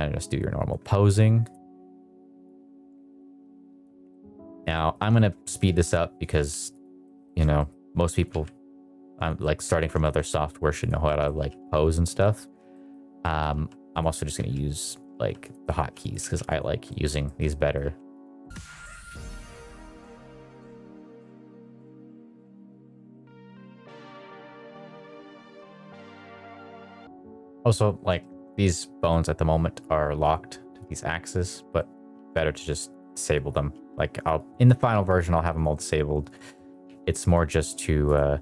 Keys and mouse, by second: 0.1 click, 1.4 click, 2.4 click, 4.0 middle click, 4.4 shift+middle click, 4.6 middle click, 5.0 shift+middle click, 5.3 middle click, 5.6 r, 6.1 click, 6.3 g, 6.9 middle click, 7.1 shift+middle drag, 7.5 middle click, 8.1 click, 8.3 g, 9.3 middle click, 9.9 shift+middle click, 10.7 click, 10.9 middle click, 11.3 r, 11.5 y, 12.6 middle click, 13.1 middle click, 13.5-16.1 typing, 14.0 middle click, 14.9 click, 16.4 click, 16.8 middle click, 17.1 shift+middle click, 17.4 middle click, 17.8-26.9 typing, 18.3 middle click, 18.6 middle click, 18.8 middle click, 18.9 middle click, 19.0 click, 19.3 Escape, 19.4 middle click, 19.5 click, 19.5 middle click, 19.7 middle click, 19.8 middle click, 19.9 middle click, 19.9 click, 20.0 shift+middle click, 20.3 click, 20.3 middle click, 20.5 middle click, 20.7 middle click, 20.8 middle click, 21.0 Escape, 21.1 middle click, 21.2 click, 21.3 middle click, 21.5 middle click, 21.6 middle click, 21.8 middle click, 22.0 middle click, 22.1 middle click, 22.2 middle click, 22.3 middle click, 22.5 middle click, 22.6 middle click, 22.7 middle click, 22.9 shift+middle click, 23.0 click, 23.1 middle click, 23.4 middle click, 23.5 shift+middle click, 23.6 click, 23.9 Escape, 24.2 middle click, 24.3 click, 24.7 middle click, 24.9 shift+click, 25.0 middle click, 25.2 middle click, 25.4 middle click, 25.7 middle click, 25.9 click, 26.0 middle drag, 26.1 shift+click, 26.3 middle click, 26.4 middle click, 26.6 middle click, 26.7 Escape, 26.7 middle click, 27.4 click, 28.1 shift+middle drag, 28.6 middle click, 29.0 middle click, 30.2 click, 30.6 click, 31.7 middle drag, 32.1 r, 32.9 middle click, 33.7 r, 34.3 click, 34.5 middle click, 34.8 r, 35.6 middle click, 36.2 click, 36.4 middle drag, 36.7 r, 37.4 middle click, 38.0 click, 38.3 middle click.